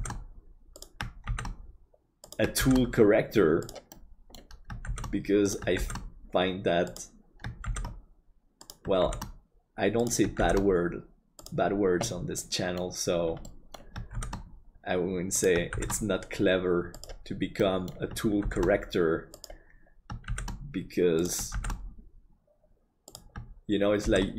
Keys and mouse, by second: 3.9 middle click, 12.4 middle click, 13.5 middle click, 14.1 shift+d, 17.6 middle click.